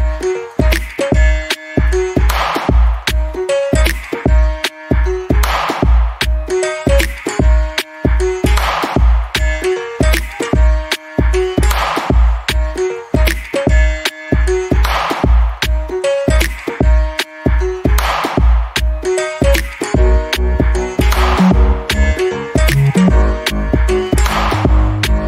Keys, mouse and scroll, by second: 1.1 click, 3.4 right click, 3.9 click, 5.5 scroll down 1, 5.7 alt+click, 7.4 alt+middle click, 7.7 scroll up 1, 8.4 click, 11.2 shift+right click, 11.6 click, 15.3 ctrl+z, 15.7 click, 17.5 right click, 18.0 click, 21.2 alt+click, 22.4 right click, 22.8 click.